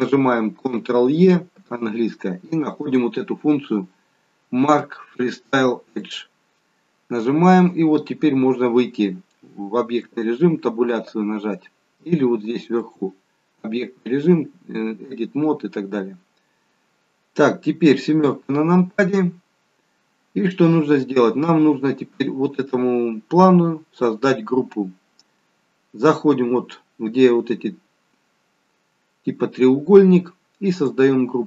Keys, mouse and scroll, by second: 1.5 ctrl+e, 9.9 Tab, 12.7 click, 18.1 KP_7, 19.9-21.1 scroll up 1, 30.6 click.